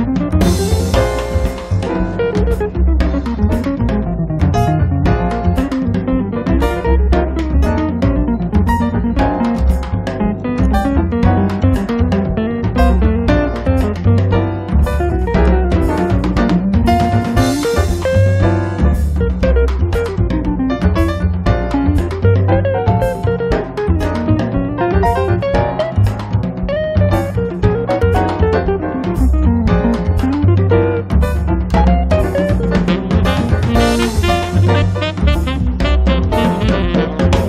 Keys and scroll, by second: 18.5 space, 32.7 3.